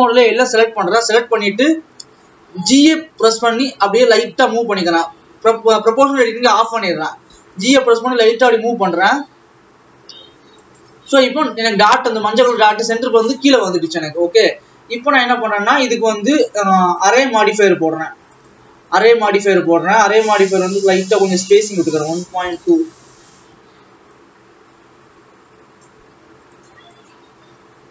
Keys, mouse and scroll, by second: 2.8 g, 4.9 o, 7.3 g, 11.6 alt+a, 12.8 ctrl+s, 13.9-14.6 scroll down 6, 14.6 Tab, 16.5 click, 18.6-20.1 drag, 20.6-23.6 drag, 24.2-26.8 drag.